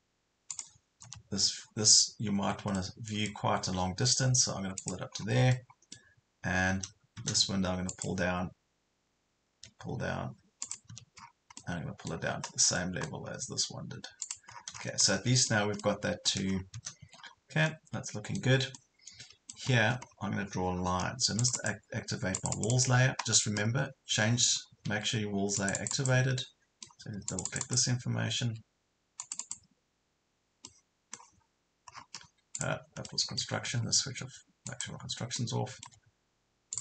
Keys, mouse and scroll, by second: 0.5 click, 1.0 scroll down 1, 1.7-2.8 scroll, 2.8 middle click, 4.8 click, 5.1 scroll down 1, 5.5 middle click, 7.9 click, 9.5 m, 10.7 click, 11.2 scroll down 1, 11.6 middle click, 12.5 scroll up 1, 12.8 middle click, 13.3 scroll up 1, 14.3 click, 14.5 scroll down 1, 15.1-16.5 middle drag, 16.5 scroll down 1, 17.0 Escape, 17.2 scroll up 1, 17.7-19.7 middle drag, 19.7 scroll up 1, 20.7 scroll down 1, 21.4 click, 24.9 Escape, 25.6 click, 26.4 middle click, 27.3 click, 28.4 Escape, 29.2 click, 30.7 middle click, 31.5 scroll up 1, 31.9 scroll down 1, 32.3 Escape, 32.6 click, 33.1 middle click, 33.4 Escape, 34.7 click, 35.4 middle click, 35.8 Escape, 36.7 click.